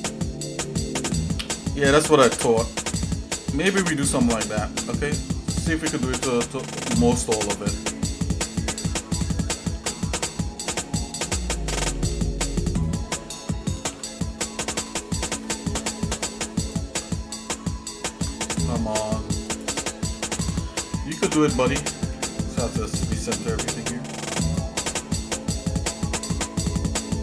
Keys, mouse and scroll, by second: 4.8 ctrl+z, 5.1 middle click, 5.7 shift+middle click, 6.5 middle click, 8.4 alt+shift+click, 9.7 ctrl+z, 10.7 alt+shift+click, 11.9 ctrl+z, 12.8 alt+shift+click, 13.9 ctrl+z, 15.0 shift+middle click, 16.6 ctrl+click, 18.2 ctrl+z, 19.4 shift+click, 20.3 ctrl+z, 20.6-20.9 scroll up 2, 21.1 scroll down 1, 21.1 scroll up 1, 21.3 scroll down 1, 22.1 KP_Decimal, 23.1-23.6 scroll down 2, 23.8 shift+middle click, 24.4 shift+click, 24.9 middle click, 25.9 middle click, 26.4 shift+middle click, 27.1 middle click.